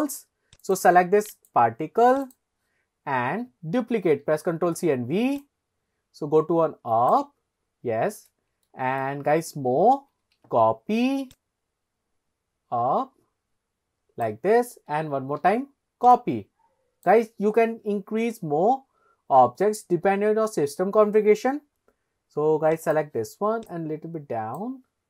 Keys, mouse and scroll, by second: 0.6 click, 1.4-2.4 right drag, 3.1 scroll down 1, 4.2 ctrl+c, 4.7 ctrl+v, 4.8 scroll down 1, 5.4 click, 5.6 click, 7.9 scroll down 2, 8.7-9.1 shift+middle drag, 10.2 ctrl+c, 10.5 ctrl+v, 11.4 click, 11.6 click, 15.2 ctrl+c, 15.5 ctrl+v, 16.2 click, 20.1 scroll up 2, 22.9 click, 23.8 click.